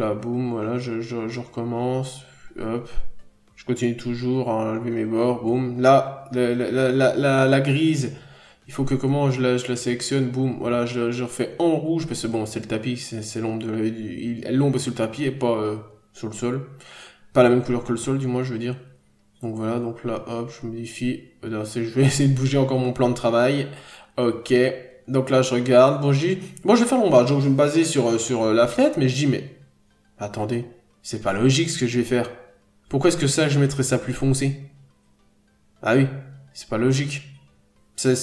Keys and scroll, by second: 0.8 scroll up 1, 1.7 n, 2.7 n, 3.4 n, 5.0-5.5 scroll down 1, 7.5 f, 8.3 ctrl+z, 10.8 n, 11.0 f, 12.6 scroll up 1, 12.8 p, 15.0 b, 16.4 scroll down 1, 16.5 n, 16.8-17.2 scroll up 1, 17.2 b, 18.9-19.9 typing, 20.5 scroll down 1, 20.8 ctrl+z, 21.4 n, 21.6-22.0 scroll down 1, 23.1-23.5 scroll up 1, 35.0 ctrl+d, 35.1 f, 36.2 scroll up 1, 36.9 n.